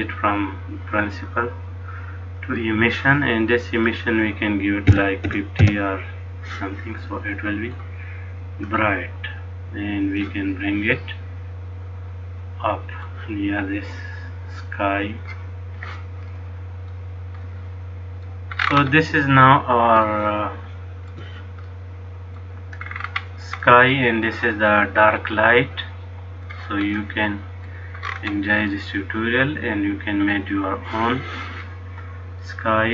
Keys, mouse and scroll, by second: 3.9 click, 7.2 middle click, 8.5 click, 11.2 middle click, 14.1 click, 16.5 middle click, 17.6 middle click, 18.8-19.6 scroll up 6, 20.2 shift+middle click, 21.8 middle click, 23.0-23.8 scroll down 6, 23.8 middle click, 25.3 click, 27.0 middle click, 28.2-28.9 scroll up 6, 28.9 middle click, 32.7 middle click.